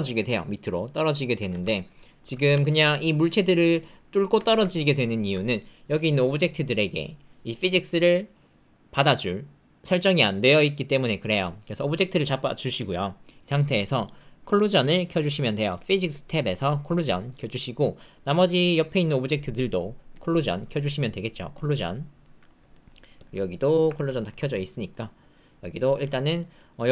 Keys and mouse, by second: 0.1 space, 1.3 space, 1.7 alt+click, 2.5 space, 4.3 space, 4.7 alt+click, 22.2 middle click, 22.7 middle click, 23.9 ctrl+middle click, 24.1 shift+middle click, 26.4 middle click.